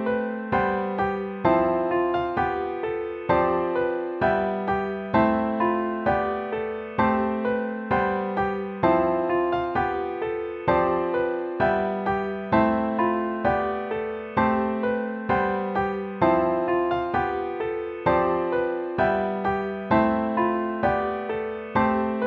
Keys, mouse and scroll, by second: 0.2 BackSpace, 2.8 BackSpace, 2.9 BackSpace, 4.1 BackSpace, 4.8 BackSpace, 5.0 BackSpace, 5.5 ctrl++, 6.1 ctrl+-, 6.9 ctrl++, 7.2 BackSpace, 8.7 ctrl+-, 9.5 ctrl++, 9.8 ctrl++, 11.2 ctrl+-, 11.8 ctrl+-, 12.2 BackSpace, 13.1 BackSpace, 13.5 ctrl++, 14.3 ctrl++, 14.7 BackSpace, 15.2 ctrl++, 16.2 BackSpace, 16.4 ctrl+-, 17.6 ctrl++, 18.3 BackSpace, 18.5 BackSpace, 19.2 BackSpace, 19.5 BackSpace, 21.0 ctrl++, 21.3-22.2 typing.